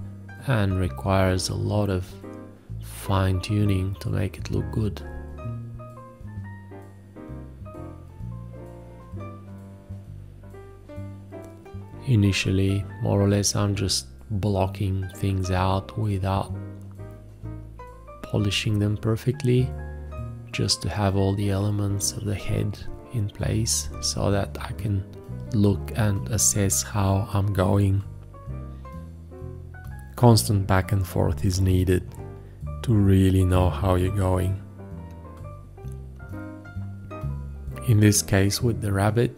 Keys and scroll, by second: 0.0-3.7 typing, 2.1 ctrl+a, 2.8 ctrl+space, 3.3 ctrl+1, 4.2 ctrl+space, 4.5 ctrl+a, 5.1 BackSpace, 5.6 ctrl+space, 6.0 v, 6.9 ctrl+z, 7.4 q, 7.7 space, 7.8 b, 7.9 ctrl+a, 8.7 ctrl+space, 8.9 v, 10.2 ctrl+space, 11.8 space, 12.1 b, 12.7 ctrl+space, 12.9 v, 14.6-17.5 typing, 15.8 ctrl+z, 16.1 ctrl+Tab, 16.2 ctrl+s, 16.2 ctrl+Tab, 18.7 v, 23.5 b, 24.1 d, 24.3 Escape, 24.4 d, 25.2 b, 29.3 b, 30.7 ctrl+s, 30.9-33.7 typing, 34.1 ctrl+space, 34.9-39.2 typing, 34.9 ctrl+a.